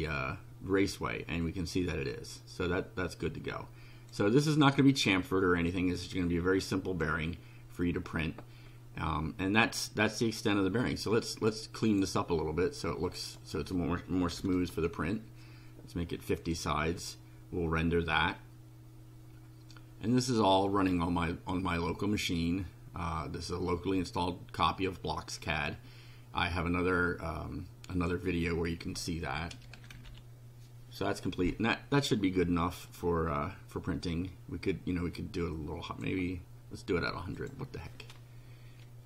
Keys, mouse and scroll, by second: 0.9-4.3 drag, 6.2 click, 11.7 click, 13.1 click, 14.1-14.9 typing, 16.4 click, 21.0 click, 27.9 click, 30.0 Delete, 30.2 e, 31.5-36.2 drag, 37.4 click.